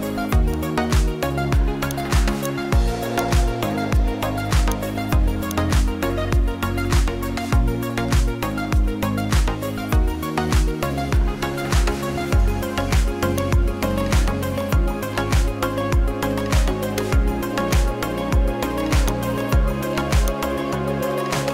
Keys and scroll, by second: 13.1 ctrl+alt+space.